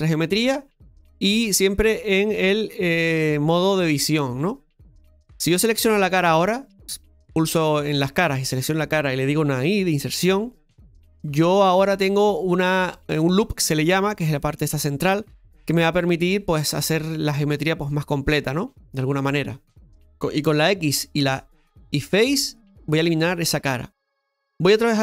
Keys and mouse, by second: 1.5-4.2 drag, 5.7 right click, 6.7 click, 8.1 right click.